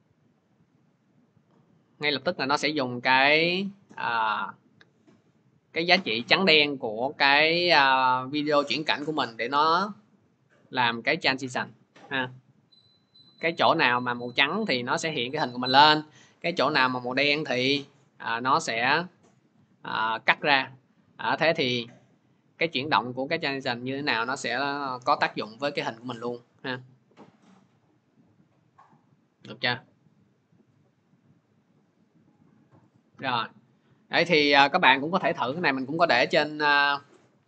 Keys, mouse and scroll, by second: 15.1-22.2 drag, 32.7 click, 35.5 click.